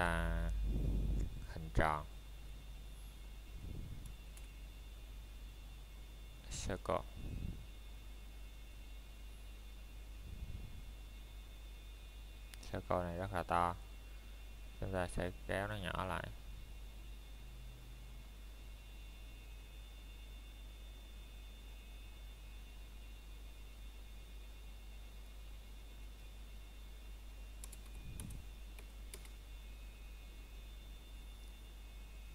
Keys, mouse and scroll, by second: 1.0 shift+Num_Lock, 1.0 scroll up 1, 1.1 shift+s, 7.2 click, 8.7 middle click, 9.0 scroll up 1, 10.3 middle click, 10.6 scroll up 1, 11.5 Tab, 12.5 click, 13.1 middle click, 13.4 scroll down 1, 13.8 middle click, 20.1 middle click, 20.7-21.2 scroll up 1, 21.2 middle click, 22.4 shift+a, 24.8 click, 29.6 middle click, 29.8 scroll down 1.